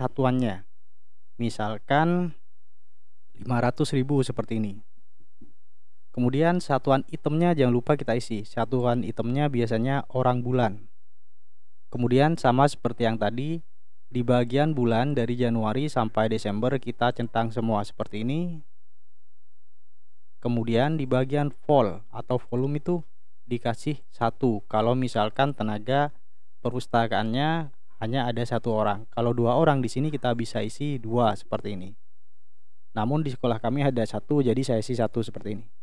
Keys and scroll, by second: 3.2 5, 3.9 0, 31.0 2, 34.5 1.